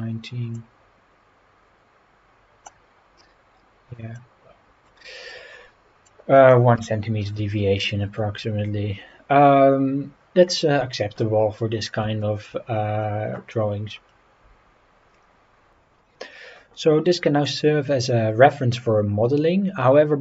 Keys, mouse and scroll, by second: 0.5 click, 4.2 click, 6.1-6.5 drag, 6.8 Delete, 7.2 scroll down 3, 8.0 scroll up 2, 8.3 scroll down 3, 9.6 scroll down 1, 11.7 scroll down 2, 12.2 shift+middle drag, 13.9-14.2 scroll up 3.